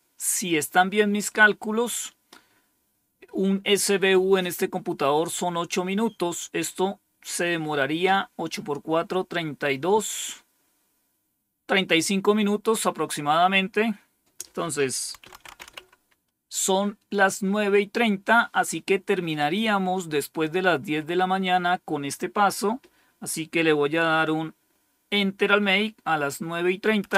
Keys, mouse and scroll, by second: 14.8-16.1 typing, 27.0 Return.